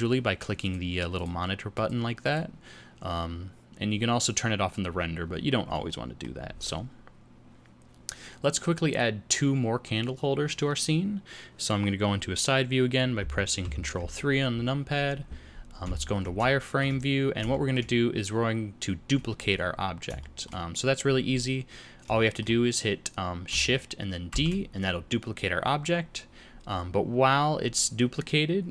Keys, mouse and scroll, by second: 0.6 click, 1.1 click, 1.7 click, 2.2 click, 5.6 middle click, 13.5 ctrl+KP_3, 15.8 z, 16.5 shift+middle click, 17.0-17.4 scroll down 2, 17.4 shift+middle click, 20.1 shift+middle click, 22.1 shift+middle click, 24.3 shift+d.